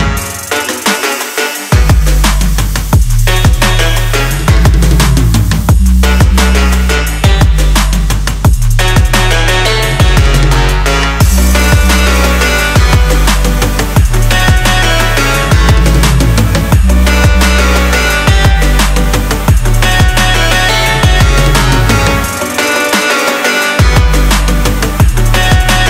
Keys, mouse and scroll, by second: 11.6-14.6 drag, 15.2-17.3 drag, 17.3-18.0 shift+middle drag, 18.0-18.5 scroll down 2, 18.5-19.1 middle drag, 19.1 g.